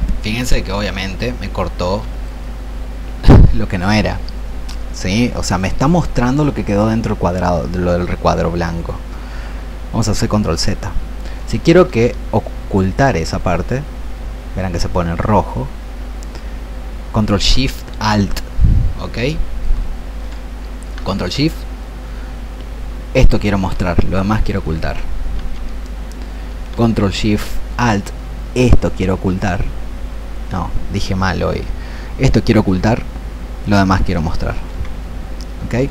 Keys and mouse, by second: 0.8-3.1 drag, 13.3-20.5 ctrl+alt+shift+drag, 21.9 ctrl+shift+click, 25.4 ctrl+shift+z, 28.2-35.9 ctrl+alt+shift+drag.